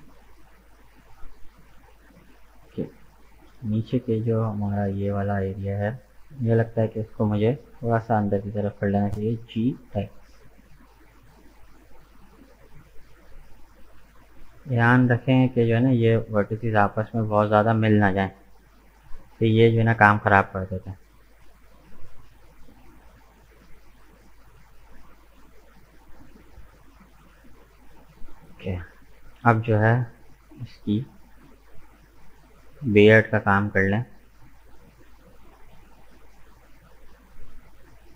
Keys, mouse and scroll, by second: 3.6 alt+right click, 4.0-7.1 middle drag, 7.7 KP_1, 9.4 g, 14.0-14.3 scroll up 1, 15.0 right click, 15.4-17.2 middle drag, 17.2 shift+right click, 18.0 KP_1, 19.3 g, 22.4-22.7 scroll down 2, 23.4 Tab, 23.5 right click, 24.0 scroll down 2, 24.5-27.5 middle drag, 27.7-28.2 scroll up 3, 28.2 right click, 28.6 Tab, 28.9 middle click, 29.5 right click, 29.9-32.9 middle drag, 33.0-33.6 scroll up 2, 33.6-36.4 middle drag, 36.4-37.7 drag, 37.7 right click.